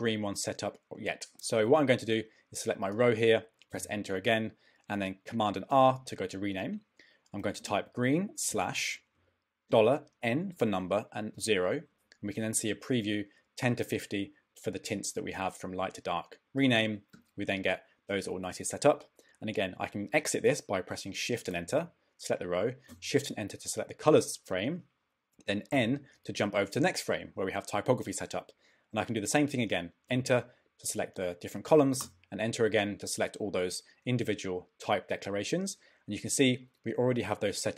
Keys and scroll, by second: 3.7 Return, 5.7 super+r, 7.2-8.5 typing, 9.7 shift+4, 10.2 shift+n, 11.3 0, 21.5 shift+Return, 25.7 n, 30.1 Return.